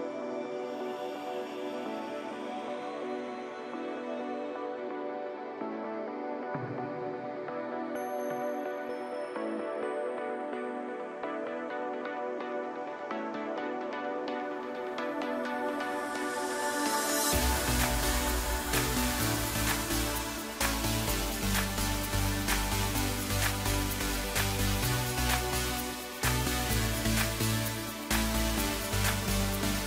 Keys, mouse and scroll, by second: 1.1 click, 1.6 Tab, 1.9 middle click, 2.6 scroll up 2, 3.5 3, 4.1 click, 4.5 scroll down 4, 4.7-6.1 middle drag, 6.1 shift+g, 7.9 middle click, 8.7 scroll up 2, 9.7-10.7 drag, 11.3 click, 12.1 Tab, 13.5 drag, 14.0 scroll down 2, 14.2-15.0 middle drag, 15.0-15.7 scroll up 2, 15.7 click, 16.7 click, 17.7 click, 18.4 drag, 18.9-19.8 scroll down 8, 19.8 KP_0, 21.5-22.7 scroll up 8, 22.7 click, 24.4 drag, 26.6-27.6 drag, 28.2-28.8 scroll up 2, 28.8-29.4 scroll down 4, 29.4-29.8 middle drag.